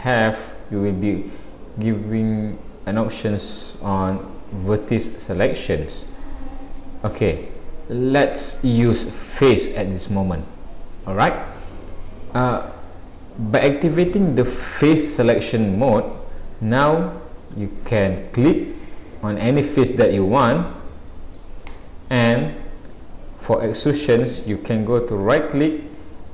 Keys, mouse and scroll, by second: 0.4 scroll up 1, 1.1 scroll up 2, 1.2 middle click, 3.9 click, 4.5 click, 5.4 click, 5.9 click, 6.7 click, 7.2 click, 8.1 click, 10.1 click, 16.1 middle click, 19.7 middle click, 21.7 click, 25.2 right click.